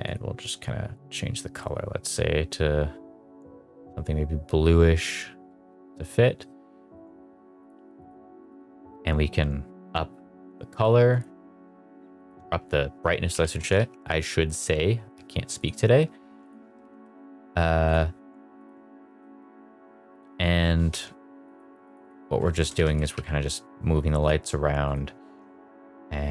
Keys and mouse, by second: 0.0 click, 7.9 click, 8.4 click, 10.7 click, 11.1 click, 12.2 click, 13.2 g, 13.5 z, 13.7 z, 16.4 click, 16.7 g, 17.0 z, 17.2 z, 17.8 click, 18.6 click, 18.9 g, 19.2 z, 19.3 z, 20.8 Escape, 21.4 click, 22.0 click, 22.7 g, 22.9 z, 23.1 z, 24.2 click, 24.8 click.